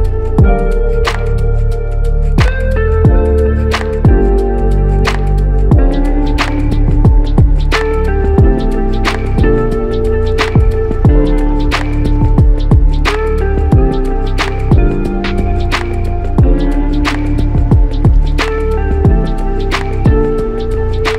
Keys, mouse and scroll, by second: 1.5 double click, 3.4 f, 4.2 double click, 7.1 alt+click, 9.1 alt+shift+click, 12.1 alt+click, 14.9 alt+click, 17.8 alt+click, 18.9 double click, 19.5 alt+click.